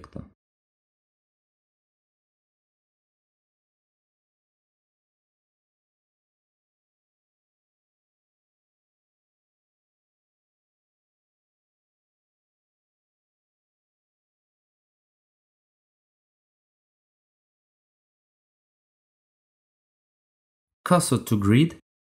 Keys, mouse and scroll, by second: 1.1 KP_7, 3.0-4.1 scroll up 2, 6.7 click, 7.7-8.3 scroll up 4, 9.6 click, 9.6 scroll up 2, 10.5 scroll up 2, 11.6 shift+middle click, 12.7-13.5 scroll up 2, 14.4-14.9 scroll down 2, 15.9-16.4 scroll down 1, 16.4 click, 19.4 shift+s.